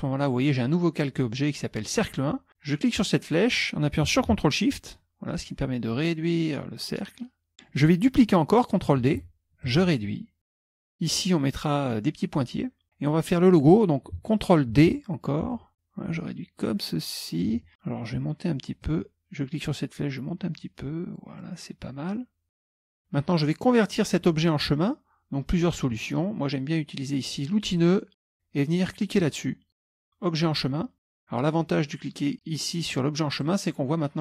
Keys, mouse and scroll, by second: 2.8 click, 9.2 ctrl+d, 9.7-10.9 ctrl+shift+drag, 14.9 ctrl+d, 15.6-17.6 ctrl+shift+drag, 18.9-22.7 ctrl+drag, 27.7 click, 33.5 click.